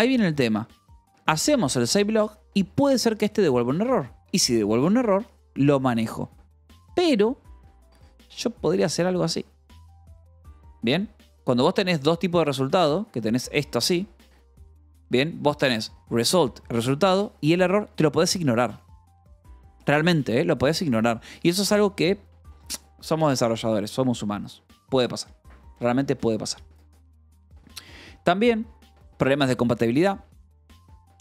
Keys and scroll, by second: 0.1-1.4 typing, 1.7 Escape, 3.0 h, 3.4 l, 4.2 j, 5.3 j, 6.0 Escape, 6.4-9.3 typing, 7.7 Escape, 10.0 Escape, 10.5-13.4 typing, 13.7 Escape, 14.9 k, 15.6 v, 15.9 b, 16.8 Escape, 17.0 h, 20.4 l, 20.9 u.